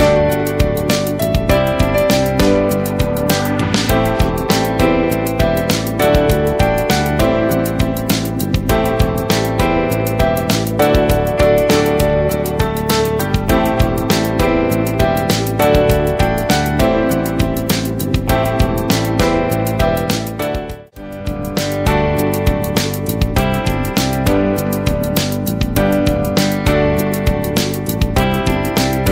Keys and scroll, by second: 8.8 ctrl+space, 9.3 ctrl+space, 10.0 space, 17.4 ctrl+space, 17.8 ctrl+space, 18.7 ctrl+space, 19.2 ctrl+space.